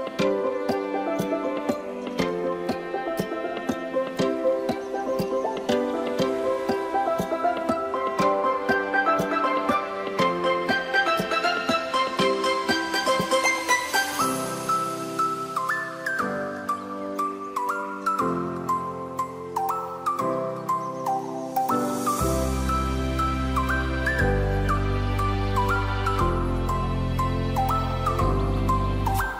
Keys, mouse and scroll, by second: 2.0 click, 2.8 click, 3.5 click, 3.9-5.3 middle drag, 5.3 click, 6.1 click, 7.1 shift+click, 8.4 ctrl+b, 12.4 click, 12.8-15.3 middle drag, 15.8 click, 16.5 click, 17.7 ctrl+r, 19.5 click, 20.4 ctrl+r, 21.7 click, 22.3 click, 23.7 click, 24.6 2, 25.3 click, 25.9 click, 27.8 ctrl+b.